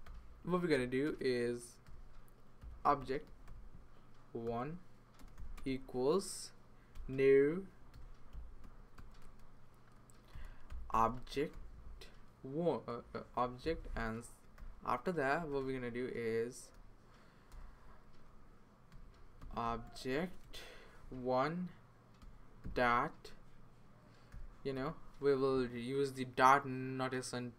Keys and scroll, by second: 0.0-5.5 typing, 6.8-12.0 typing, 13.1-14.5 typing, 14.2 Tab, 15.4 Return, 15.6 Return, 17.5 BackSpace, 18.7-20.9 typing, 21.9-22.7 typing, 24.0-24.8 typing.